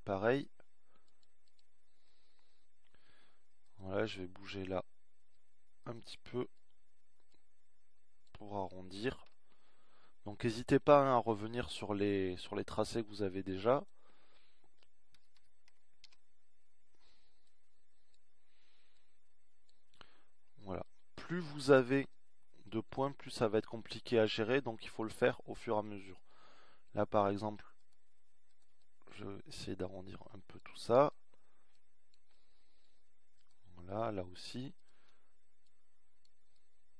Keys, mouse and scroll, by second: 1.4 ctrl+r, 8.6 middle click, 10.2-11.8 drag, 15.0-16.4 drag, 16.5 s, 29.3 click, 31.2-32.3 middle drag, 35.0 click.